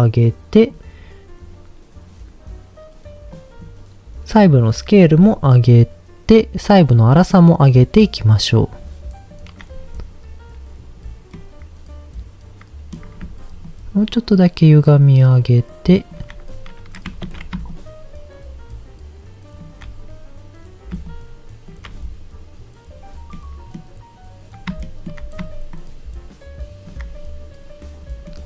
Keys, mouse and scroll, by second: 3.3 click, 4.3 click, 5.2-6.9 shift+drag, 7.5-9.3 shift+drag, 11.3-12.9 middle drag, 13.7-16.1 shift+drag, 17.3 ctrl+z, 17.7-19.6 shift+drag, 21.1 shift+click, 23.3 middle click, 24.8 shift+middle click, 25.7-26.9 shift+drag, 28.3-28.4 middle drag.